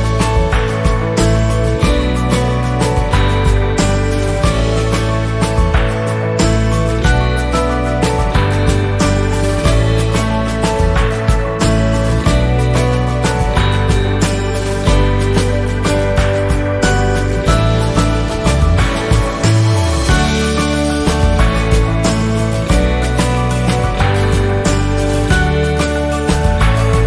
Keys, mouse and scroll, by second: 0.5 F10, 0.9 click, 1.6-16.2 shift+drag, 16.2 shift+scroll down 1, 17.0 click, 19.2 click, 19.6-19.9 shift+scroll down 1, 20.4 shift+scroll up 1, 21.4 shift+scroll down 1, 22.2-24.2 drag, 24.2 ctrl+a, 24.9 click, 25.4 shift+scroll down 1, 25.8 z, 26.2-27.0 drag.